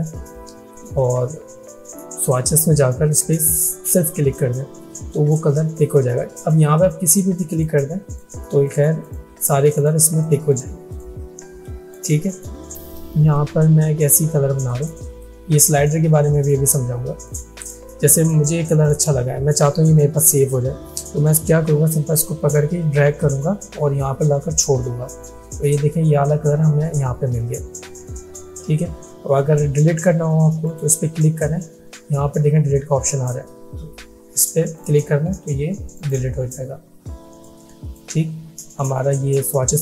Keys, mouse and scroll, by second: 4.0 click, 7.1 click, 13.1 alt+shift+click, 15.1 click, 22.3-24.7 drag, 30.7 click, 34.8-38.1 drag.